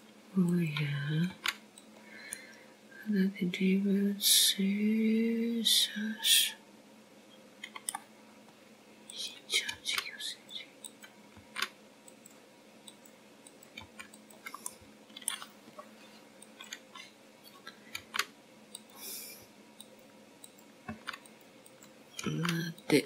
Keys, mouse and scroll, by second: 3.3 click, 4.2 g, 5.2 middle click, 11.2 scroll up 2, 12.0 click, 12.7 g, 13.8 click, 14.3 g, 15.8 click, 16.3 click, 16.7 g, 17.6 middle click, 19.3 click, 20.9 g, 22.7 click.